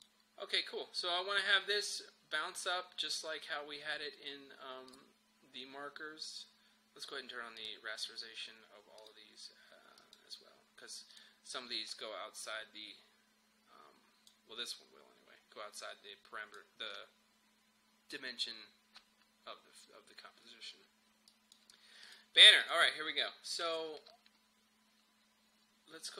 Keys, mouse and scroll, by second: 4.9 click, 7.6-19.1 drag, 21.3 click, 22.1 click.